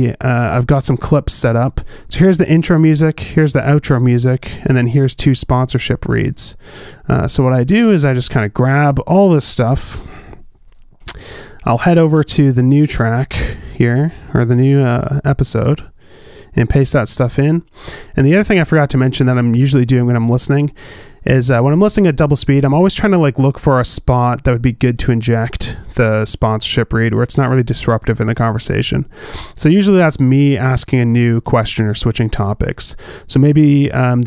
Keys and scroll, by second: 11.5 super+c, 16.4 super+v.